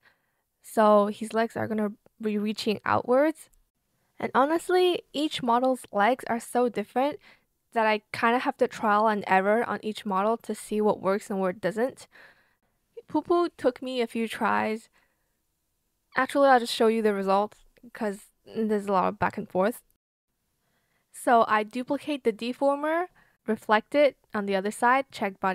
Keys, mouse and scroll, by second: 0.2 shift+click, 0.4 shift+click, 0.8 shift+click, 1.0 shift+click, 3.3 shift+click, 7.4 shift+click, 8.4 shift+click, 8.7 shift+click, 10.1 shift+b, 10.2 click, 10.6 ctrl+z, 11.1 shift+click, 12.1 shift+click, 12.2 ctrl+z, 12.2 shift+click, 12.4 shift+click, 13.5 shift+click, 14.1 shift+space, 14.3 click, 14.4 shift+click, 14.5 shift+click, 14.9 shift+click, 15.8 shift+click, 15.9 ctrl+z, 16.0 ctrl+z, 16.1 ctrl+z, 16.7 ctrl+z, 17.3 shift+click, 17.4 shift+click, 19.0 shift+click, 21.6 ctrl+c, 21.9 ctrl+v.